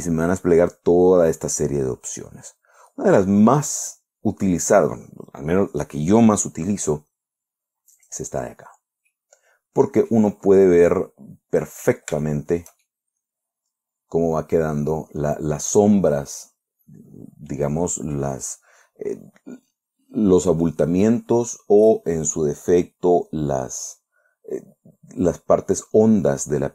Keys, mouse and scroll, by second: 8.5 click, 9.5-10.8 middle drag, 10.9 scroll up 1, 11.3-12.3 drag, 12.7 shift+click, 13.7-18.8 drag.